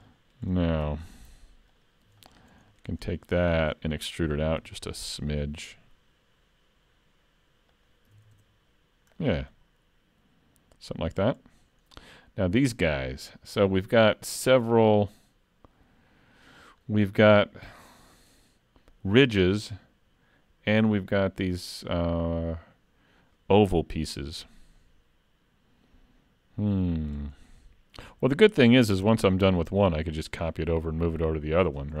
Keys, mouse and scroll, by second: 0.1 shift+middle click, 1.8 alt+click, 2.2 middle click, 2.8 shift+middle click, 3.1 middle click, 4.6 e, 8.2 alt+a, 8.3 Tab, 9.1-10.0 scroll down 3, 9.5 middle click, 11.3-12.2 scroll up 1, 12.2 scroll up 1, 15.1-16.9 scroll up 1, 16.9-18.1 scroll down 1, 19.2 middle click, 24.4-25.4 scroll down 2, 24.8 middle click, 27.4 scroll up 2, 28.0-28.7 scroll down 6, 28.7 shift+middle click, 29.1 middle click, 31.5-32.0 scroll up 3.